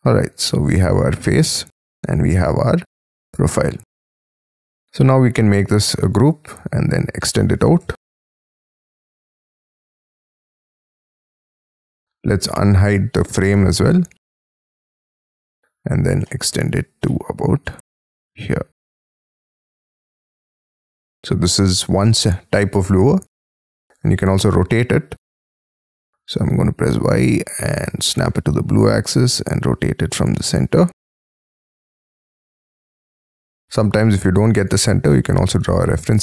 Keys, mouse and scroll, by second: 0.4 space, 1.0 e, 1.6 scroll down 1, 1.8 space, 2.3 middle click, 4.8 double click, 5.1 g, 5.6 double click, 6.5 p, 7.8 j, 8.0-9.6 scroll down 20, 8.6 j, 9.7 shift+middle click, 11.9 F2, 12.5 F3, 12.8 F4, 13.2 space, 13.4 Escape, 13.6 scroll up 5, 13.9 F4, 14.5 double click, 15.0 p, 15.7 scroll down 5, 16.2 shift+middle click, 16.9 scroll up 1, 17.1 middle click, 17.6 scroll up 1, 17.8 shift+middle click, 18.3 scroll up 6, 19.4 middle click, 20.2 shift+space, 20.4 Escape, 20.7-21.5 scroll up 11, 21.5 middle click, 23.3-23.7 scroll up 4, 23.8 q, 26.3 y, 27.8 Up, 31.3 middle click, 31.3 space, 31.7 q, 32.3 Up, 33.4 middle click, 33.6 space, 34.0 l, 35.5 space, 35.8 q.